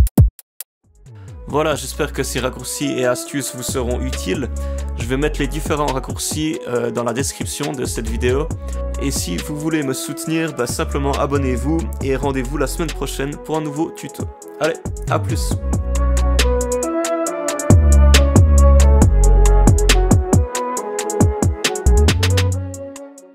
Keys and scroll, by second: 0.5 space.